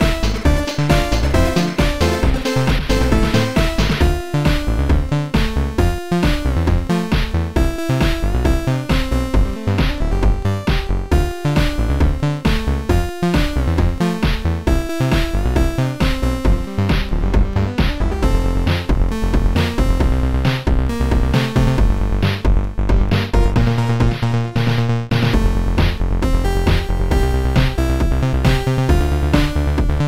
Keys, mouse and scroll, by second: 0.5 click, 1.9 click, 2.4 click, 3.6 click, 6.7 click, 8.0 click, 9.3 click, 13.0 click, 17.3 click, 18.0 click, 20.4 click, 25.9 click, 27.3 click, 28.4 click.